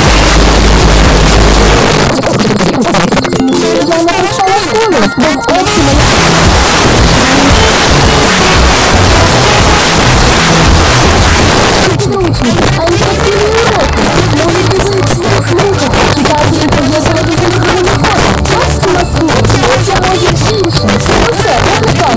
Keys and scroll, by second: 1.7 Page_Down, 11.5 Page_Down.